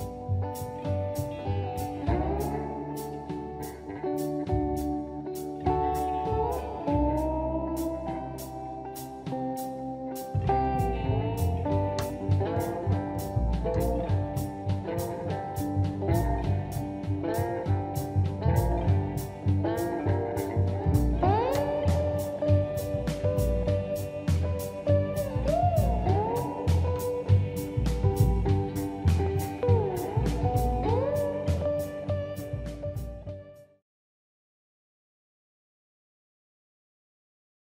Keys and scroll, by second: 1.4 space, 2.3 m, 3.7 space, 4.1 Escape, 6.0 m, 7.7 space, 10.6 space, 12.3 m, 15.7 2, 15.8 Return, 16.9 space, 27.4 m, 29.1 space.